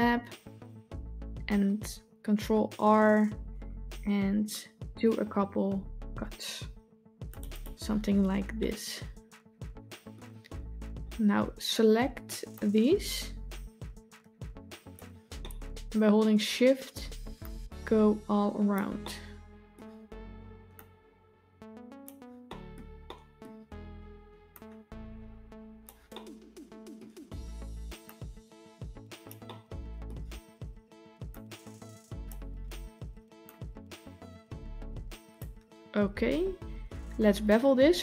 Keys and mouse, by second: 3.1 ctrl+r, 8.5-10.0 middle drag, 12.4-14.8 drag, 15.3 middle click, 17.5-18.6 shift+drag, 18.9-19.6 middle drag, 20.6-21.9 shift+drag, 22.3 middle click, 22.9-23.3 middle drag, 24.5-25.7 shift+drag, 26.0 middle click, 28.1-29.1 shift+drag, 29.3-29.9 middle drag, 31.2-32.1 shift+drag, 33.3-35.2 shift+drag.